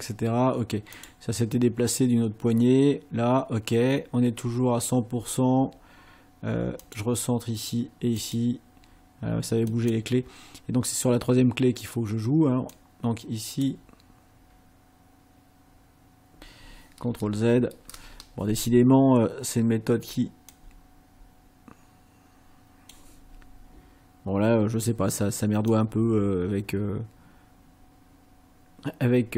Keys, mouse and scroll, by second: 1.0 click, 6.8 click, 8.2 click, 9.7 click, 12.7-13.9 drag, 17.1 ctrl+z, 20.5-23.1 drag, 25.7-29.3 drag.